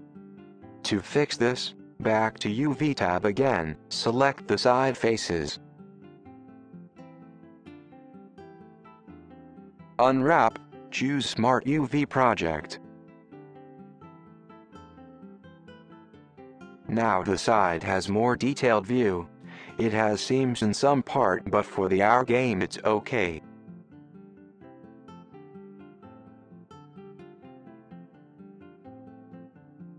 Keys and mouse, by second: 1.8-2.9 middle drag, 9.5 u, 15.4 click, 16.3-18.9 middle drag, 19.9-22.1 middle drag.